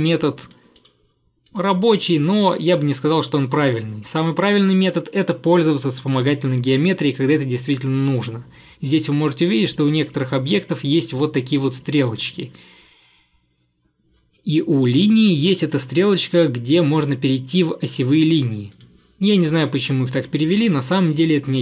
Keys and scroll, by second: 0.8 Delete.